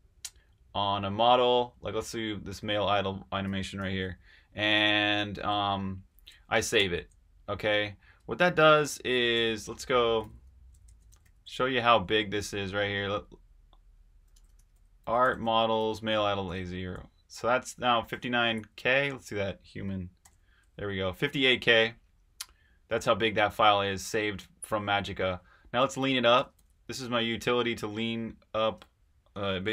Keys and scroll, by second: 3.7 8, 6.7 super+s, 8.1 super+Tab, 9.9-11.8 typing, 14.0-16.4 typing, 18.4 Up, 18.6-19.3 Left, 20.2 h, 20.3 Return, 26.0-27.0 typing, 27.4 Right, 28.7-29.7 typing.